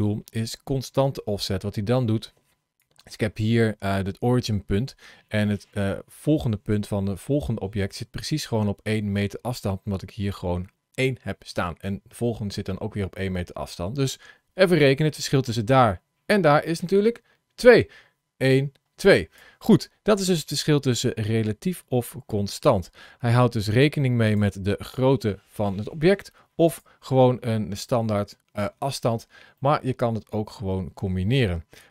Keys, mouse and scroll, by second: 1.6 ctrl+shift+a, 2.1 ctrl+shift+a, 23.5 click, 24.1 click, 26.5 click, 28.6-29.3 scroll down 4, 29.3 middle click, 31.6 click.